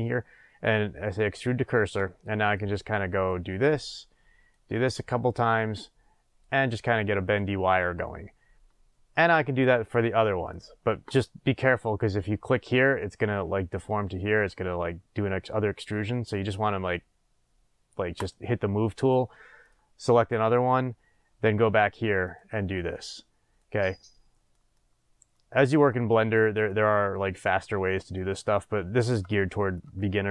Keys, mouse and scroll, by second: 3.6 click, 4.7 click, 6.6 click, 7.6-13.2 middle drag, 14.0-18.1 middle drag, 18.1 click, 19.6 click, 22.2 click, 23.0 click, 23.7 click, 24.7 click, 25.9 click, 26.6-30.3 middle drag.